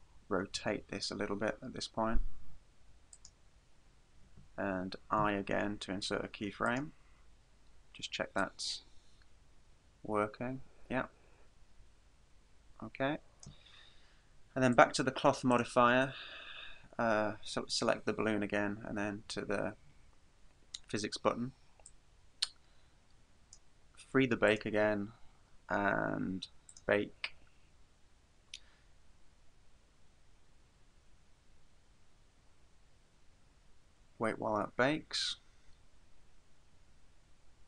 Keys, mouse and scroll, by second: 0.6 r, 3.3 click, 5.2 typing, 8.4 click, 14.8 click, 15.6 right click, 21.9 click, 24.5 click, 26.7 click.